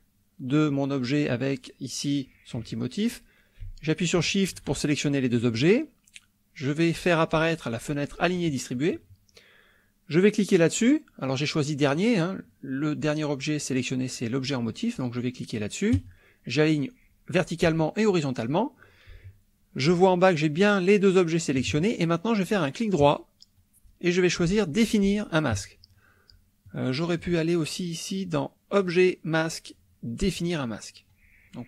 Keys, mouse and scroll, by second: 4.2 shift+click, 8.4 click, 11.3-12.1 drag, 16.0 click, 17.6 click, 23.0 right click, 26.7 click, 27.2 click, 30.3 click.